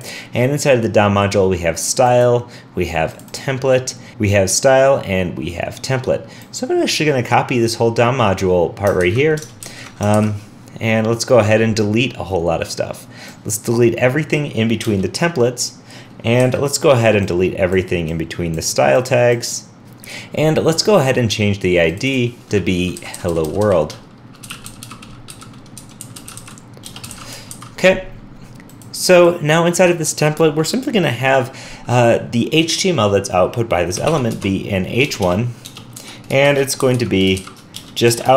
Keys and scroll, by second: 9.0 super+c, 9.6 super+c, 9.6 alt+super+Left, 10.1 super+v, 27.5 super+s.